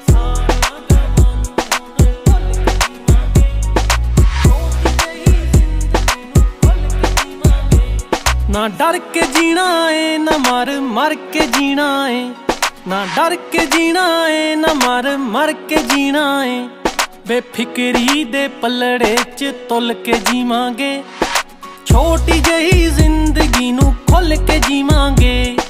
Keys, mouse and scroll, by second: 3.4 click, 8.4 click, 18.0 click, 24.3 click.